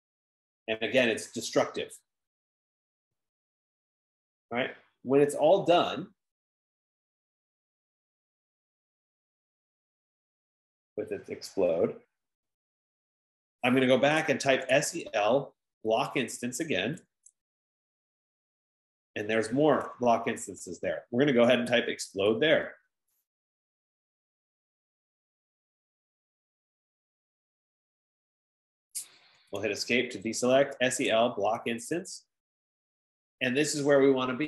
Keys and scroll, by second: 14.9-15.9 typing, 17.7-18.4 typing, 18.6 Return, 21.7-23.1 typing, 29.8 Escape, 30.2 Escape, 30.8-32.6 typing, 32.6 Return.